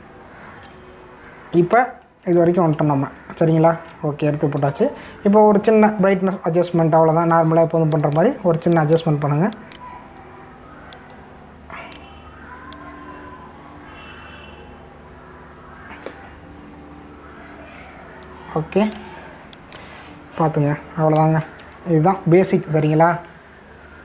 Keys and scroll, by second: 3.4 ctrl+-, 5.6 v, 22.4 ctrl+=, 23.0 ctrl+-.